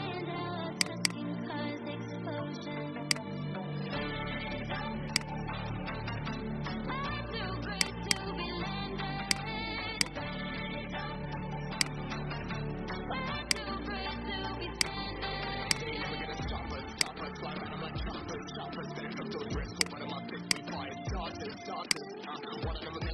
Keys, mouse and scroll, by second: 0.0-0.3 scroll down 1, 0.7 click, 5.0 shift+click, 7.6 click, 8.4 Delete, 9.3 click, 9.8 alt+click, 11.7-12.8 right drag, 13.3 click, 15.6 shift+click, 16.8-17.8 drag, 21.8 shift+click.